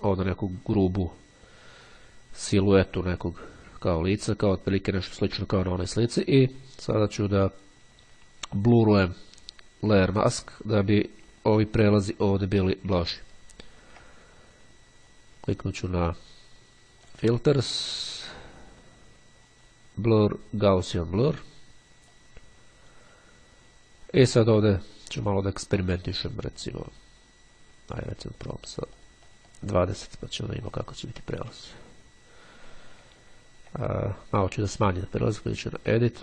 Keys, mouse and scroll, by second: 4.4-5.3 ctrl+scroll down 4, 7.7 click, 8.6 click, 11.6-12.9 ctrl+scroll up 2, 13.2-14.1 ctrl+scroll down 3, 17.2 click, 20.8 click, 22.3-23.6 drag, 24.7-27.7 drag, 27.9-30.3 drag, 30.8 click, 35.2 click.